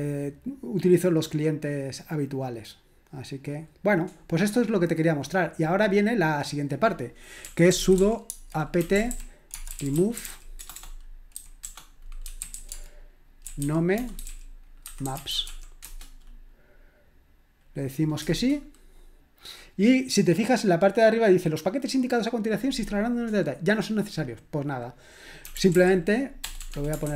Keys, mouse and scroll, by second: 3.3 click, 5.2 click, 6.4 click, 7.1-16.9 typing, 18.2 Return, 25.2-27.1 typing, 27.0 ctrl+l.